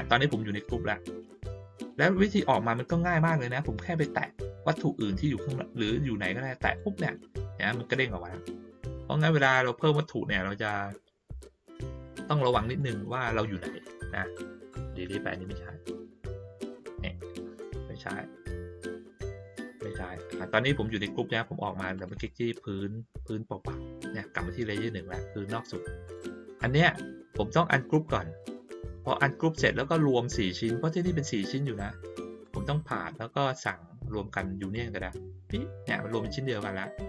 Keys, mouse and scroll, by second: 0.6 click, 8.9 click, 9.4 click, 11.8 click, 12.0 click, 12.6 click, 15.4 click, 17.6 click, 18.8 click, 19.4 click, 21.9 click, 22.1 click, 26.0 click, 27.9 click, 32.4 click, 34.6 click.